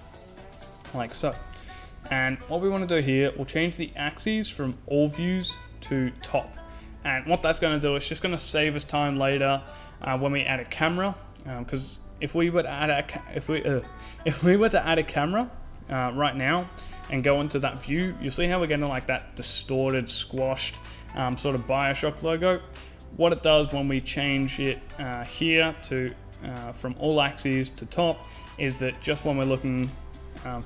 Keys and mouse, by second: 1.7 click, 2.0-4.5 middle drag, 5.9 click, 6.9 click, 7.4 middle click, 13.7-15.2 drag, 16.0 shift+a, 18.2 KP_0, 25.4 middle click, 25.8-28.3 drag.